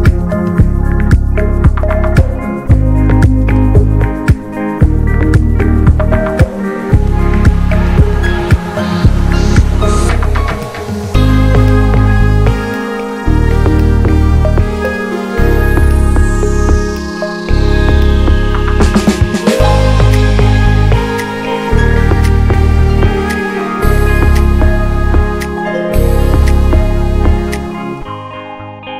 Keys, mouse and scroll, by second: 0.2 n, 0.5 shift+middle click, 1.2 ctrl+s, 1.5 middle click, 2.1 click, 2.4 a, 2.6 x, 4.4-5.7 middle drag, 5.7 shift+a, 6.6 click, 7.5 `, 8.1 alt+middle click, 8.3 alt+middle click, 8.5-9.0 scroll up 2, 9.0-10.4 drag, 10.4-12.3 middle drag, 12.3 click, 12.6 ctrl+2, 12.7 ctrl+3, 13.1 right click, 13.7 ctrl+4, 13.9 ctrl+5, 14.1 click, 14.8 scroll down 2, 14.9-16.3 shift+middle drag, 16.3-17.6 scroll up 1, 17.6 scroll down 1, 17.8 click, 18.0 alt+z, 18.2 click, 18.5 alt+z, 19.4 click, 19.6 scroll down 2, 19.8 shift+middle click, 19.9-20.3 shift+scroll up 4, 20.6 click, 21.6 shift+middle click, 21.8 s, 22.6 click, 23.2 s, 25.2 ctrl+r, 25.8 alt+z, 26.1 alt+z, 26.3 click, 26.7 s, 27.8 click, 28.3 s.